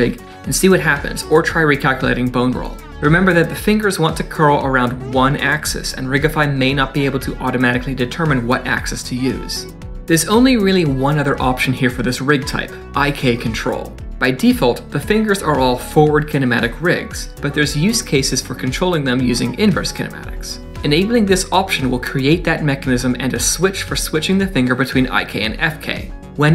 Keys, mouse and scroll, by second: 0.0 middle click, 0.9 ctrl+r, 4.0 middle click, 4.3 scroll up 2, 4.6 shift+middle click, 4.8 middle click, 5.8 click, 6.6 click, 9.7 middle click, 22.8 click.